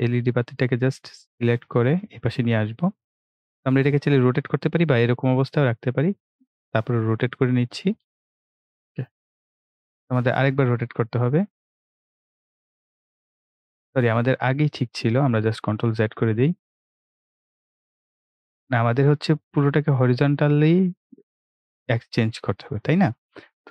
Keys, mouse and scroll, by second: 16.0 ctrl+z, 16.9 ctrl+z, 19.3-23.7 drag.